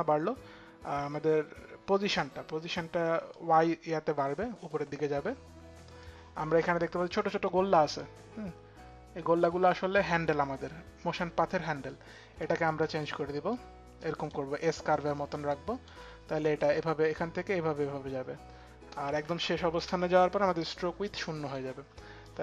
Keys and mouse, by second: 0.1 click, 3.0 click, 7.7 click, 10.8 click, 13.2 click, 15.0 click, 16.2 click, 20.7 click, 21.9 click.